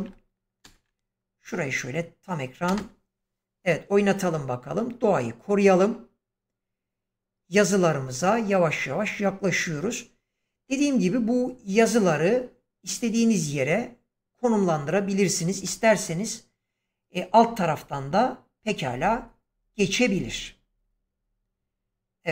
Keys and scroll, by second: 0.5 ctrl+space, 2.6 space.